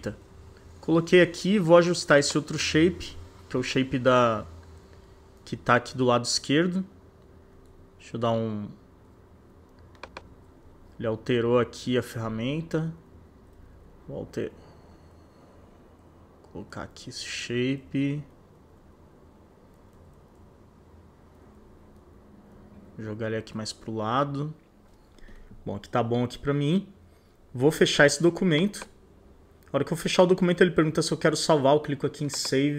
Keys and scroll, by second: 3.5 c, 4.0 shift+Up, 4.9 shift+Down, 7.3 Home, 12.1 Up, 14.4 shift+Down, 15.1 shift+Right, 16.5 shift+Down, 18.4 shift+Up, 19.4 shift+Right, 20.4 shift+Down, 21.4 shift+Up, 22.2 shift+Left, 23.6 shift+Down.